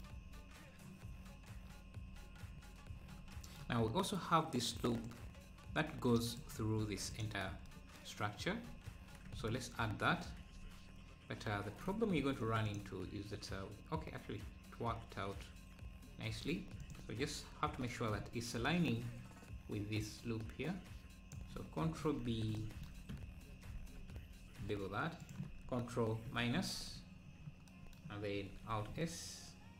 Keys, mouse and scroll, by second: 1.1 scroll up 2, 1.1-1.8 scroll down 4, 2.1 `, 5.0-6.7 drag, 6.7 `, 7.5 scroll up 2, 8.7 Tab, 12.2 ctrl+r, 17.1 KP_3, 17.8 KP_3, 18.2 scroll up 1, 19.0-19.9 scroll up 3, 20.1 click, 22.0 scroll down 1, 23.7 ctrl+b, 26.2 KP_Subtract, 28.6 alt+s.